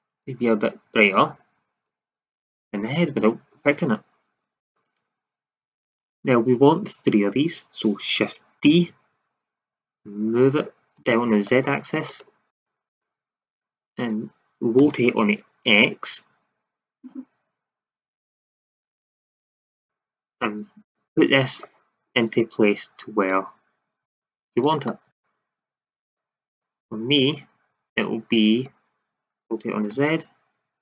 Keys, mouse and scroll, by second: 5.7 shift+z, 8.6 shift+d, 12.1-13.0 drag, 13.3 scroll up 1, 14.7 r, 19.7-20.5 drag, 25.0 middle click, 29.4 r.